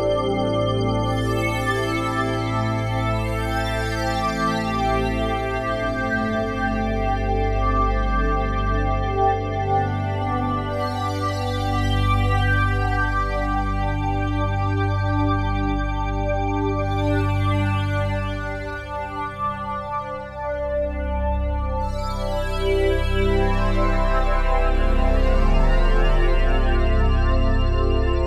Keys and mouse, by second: 0.0 click, 0.4 click, 1.7-3.2 alt+drag, 3.5 ctrl+alt+click, 4.8 click, 5.2 click, 7.2 click, 7.7 click, 8.3 ctrl+alt+click, 9.1 ctrl+alt+click, 10.0 ctrl+alt+click, 11.0 click, 14.0 click, 17.9 click, 19.5 click, 20.5 click, 25.5 click, 27.8 ctrl+alt+click.